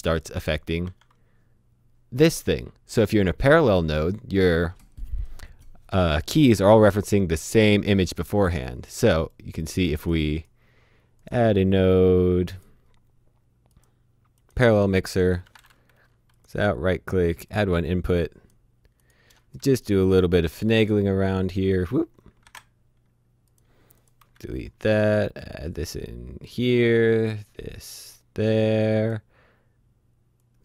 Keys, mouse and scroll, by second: 0.1 click, 0.8 shift+h, 7.5 click, 10.4 right click, 11.2 click, 15.9 Delete, 16.3 click, 16.5 right click, 17.5 click, 19.3 Delete, 19.5 click, 21.1 Delete, 22.4 z, 23.5 click, 24.6 Delete, 25.4 click.